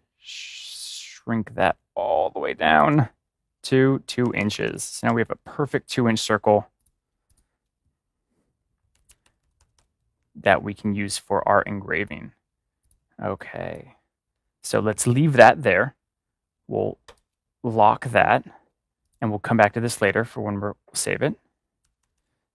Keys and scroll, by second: 4.0 ctrl+=, 8.8 ctrl+-, 21.8 ctrl+-.